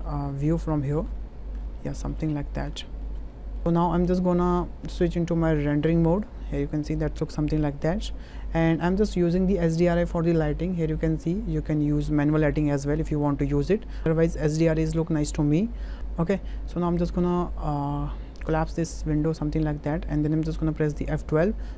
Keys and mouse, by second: 0.3 click, 0.8 shift+click, 1.1 ctrl+click, 1.8 shift+click, 2.3 ctrl+click, 2.8 shift+middle click, 3.3 middle click, 10.0 click, 18.5 click, 21.6 F11.